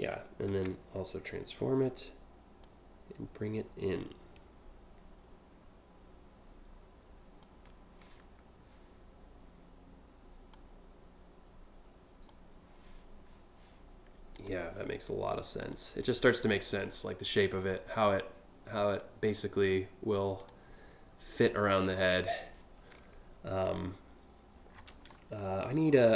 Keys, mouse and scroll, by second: 0.1 ctrl+t, 2.2-7.0 drag, 10.1-11.9 drag, 13.9 click, 15.2 click, 15.7-17.8 drag, 18.6-19.8 drag, 20.0 click, 21.0 click, 21.4 scroll down 1, 23.3 click, 24.4 scroll down 4, 25.0 scroll up 2, 25.4 scroll down 1, 25.7-26.1 scroll up 2.